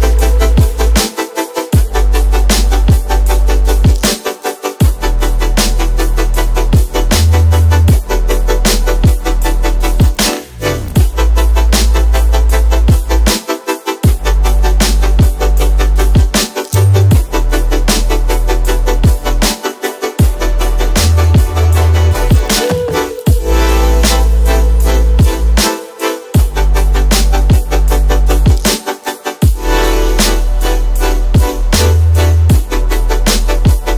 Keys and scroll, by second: 8.8 Return, 9.0 Return, 11.7 ctrl+KP_0, 11.9 ctrl+KP_Add, 13.1 b, 13.4 space, 25.7 space, 31.0 space, 31.6 space.